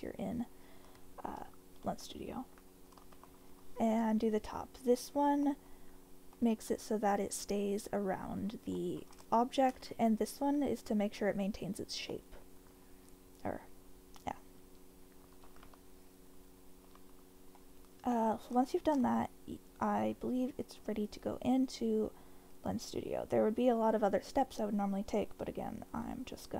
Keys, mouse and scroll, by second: 0.4 middle click, 2.1 ctrl+k, 3.1 shift+k, 5.4 click, 5.6 middle click, 6.3 middle click, 6.7 click, 8.8 middle click, 9.3 shift+middle click, 12.1 middle click, 14.6 Tab, 15.3 Tab, 17.5-18.4 middle drag, 18.6 shift+middle drag, 21.0-26.5 drag.